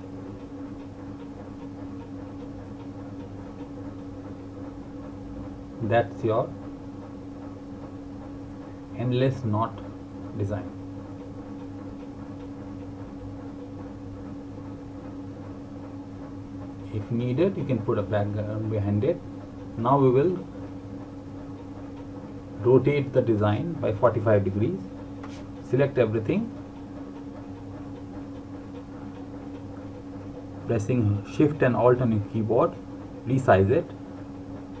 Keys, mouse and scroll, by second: 10.2 click, 18.1 click, 24.1 click, 31.6 click.